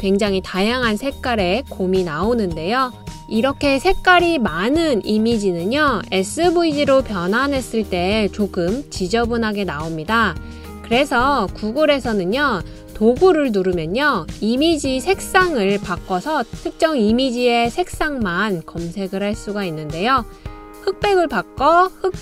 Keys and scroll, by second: 14.0 typing.